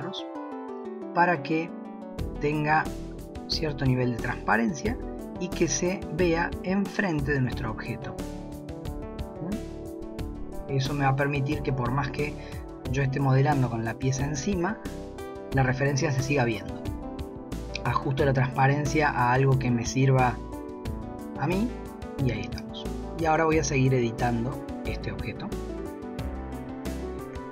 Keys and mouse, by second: 0.0 click, 2.2 drag, 2.8-4.8 drag, 5.2 click, 6.9 click, 9.2 click, 9.6 click, 11.7-13.6 middle drag, 15.3 KP_1, 19.2-21.6 drag, 23.3 click, 24.4 Tab, 27.4 shift+middle click.